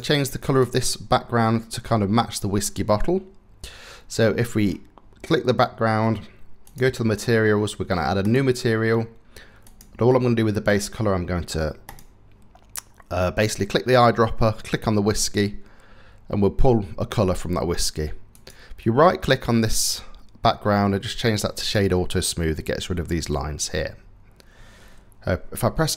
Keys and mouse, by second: 6.3 click, 19.2-21.3 drag.